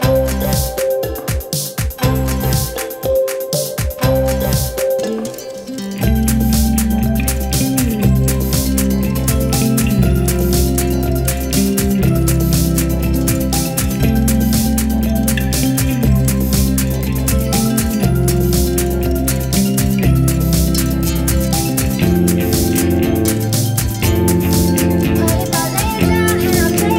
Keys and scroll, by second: 15.7 ctrl+j, 16.5 z, 19.2 ctrl+l, 21.6 ctrl+l.